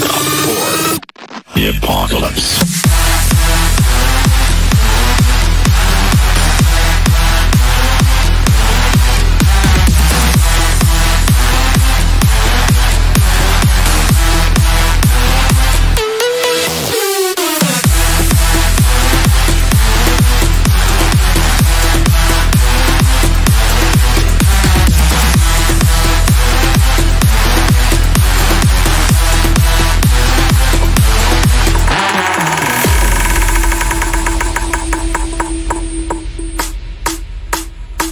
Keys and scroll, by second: 11.6 Delete, 16.2 Left, 18.1 F3, 35.9 KP_Add.